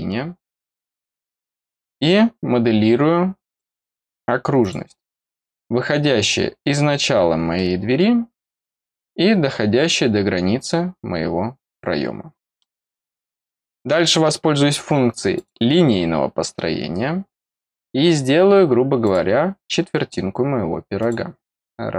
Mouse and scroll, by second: 1.0 click, 3.4 click, 4.5 click, 5.8-6.2 scroll down 2, 7.5 middle click, 11.6 click, 12.2 scroll down 2, 12.5 middle click, 15.3 click, 17.5 click, 19.0 click, 20.9 click.